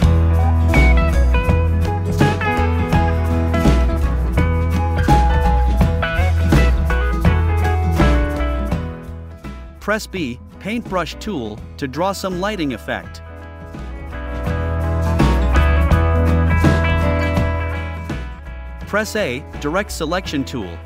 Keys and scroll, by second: 0.4 v, 10.9 v, 20.5 a.